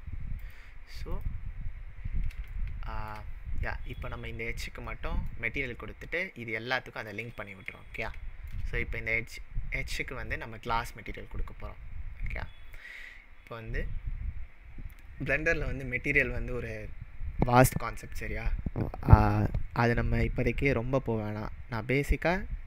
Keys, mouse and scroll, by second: 0.4 click, 1.1 click, 2.6-3.0 shift+middle drag, 3.3-3.9 scroll up 4, 4.0 click, 4.9-5.4 middle drag.